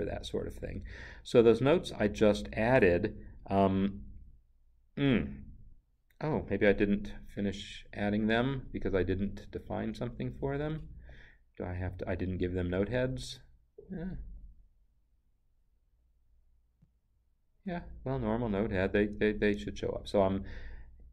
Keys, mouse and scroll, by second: 6.7 click, 11.9 click, 16.8 click, 19.0 Down.